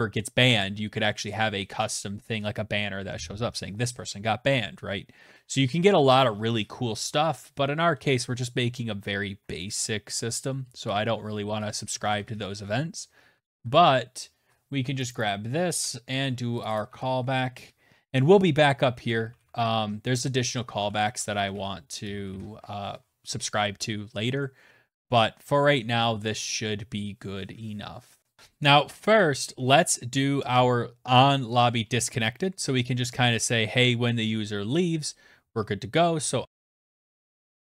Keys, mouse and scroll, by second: 9.5 Down, 9.9 Return, 10.8-13.0 typing, 14.1 click, 14.2 click, 14.8 ctrl+c, 15.6 click, 15.8 click, 15.9 ctrl+v, 17.8-21.8 typing, 28.3 click, 29.4 Return, 29.5 Return, 34.9-37.7 typing.